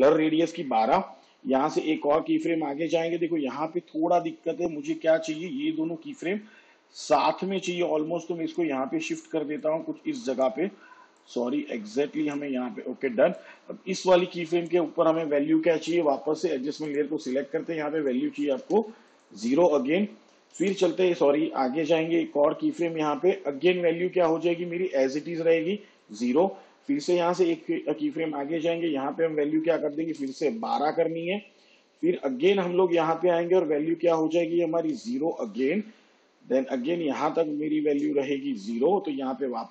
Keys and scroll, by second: 1.9 k, 18.7 0, 20.7 j, 21.8 k, 27.5 k, 29.9-30.8 typing, 34.9 0.